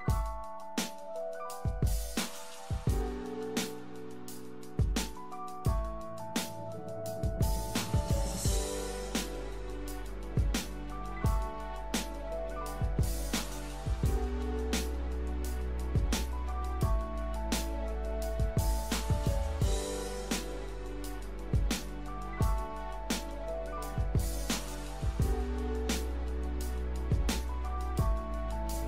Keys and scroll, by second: 22.3 l.